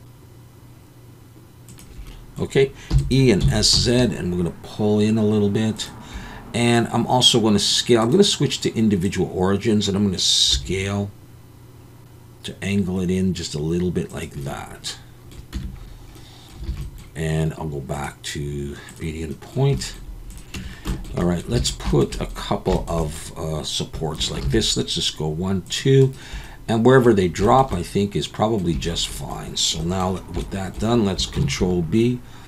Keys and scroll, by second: 2.9 e, 3.4 s, 3.7 z, 10.5 s, 15.5 Tab, 16.7 alt+a, 20.5 Tab, 21.6 alt+a, 24.4 ctrl+r, 31.4 ctrl+b.